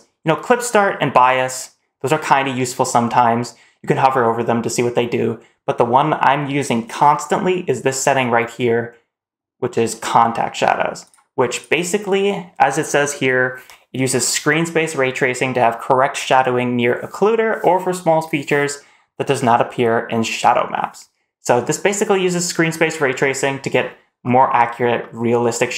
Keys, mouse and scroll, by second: 11.0 click, 11.4 click, 24.1-24.9 scroll up 2, 24.9-25.5 middle drag.